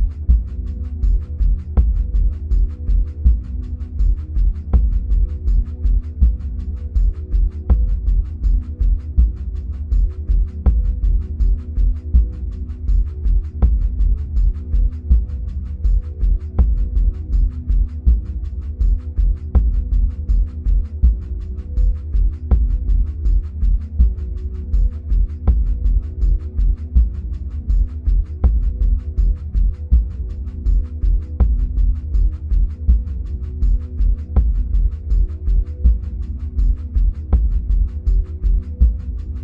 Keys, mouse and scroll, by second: 0.7-2.0 scroll up 2, 2.0-11.6 drag, 11.6-17.4 middle drag, 17.4-26.1 drag, 26.1-28.7 middle drag, 28.7-39.4 drag.